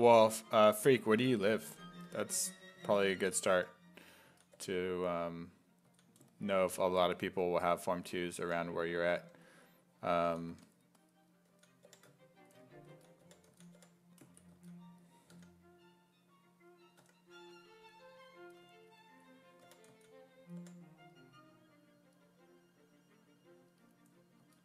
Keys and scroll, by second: 2.4-4.6 typing, 5.9 s, 8.0-15.4 typing, 17.0 w, 19.5-20.6 typing, 24.4-24.6 typing.